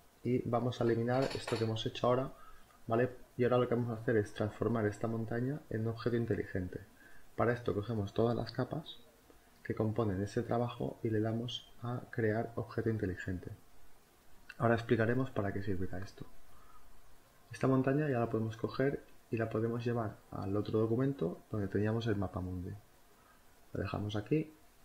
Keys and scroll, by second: 22.5 ctrl+t.